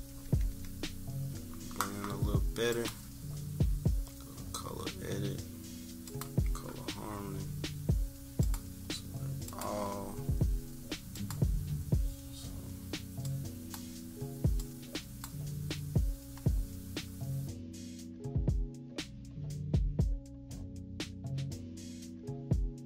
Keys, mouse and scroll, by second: 0.2 =, 0.5 =, 0.9 scroll down 2, 2.7-5.9 drag, 6.0 click, 8.4 click, 9.4 click, 11.1 click, 13.2 click, 14.5 click, 17.7 click, 18.2 click, 18.7 click, 19.0 click, 19.3 click, 19.5 click, 19.7 click, 20.0 click, 20.3 click, 21.3 click, 21.6 click, 21.9 click, 22.2 click, 22.4 click, 22.7 click.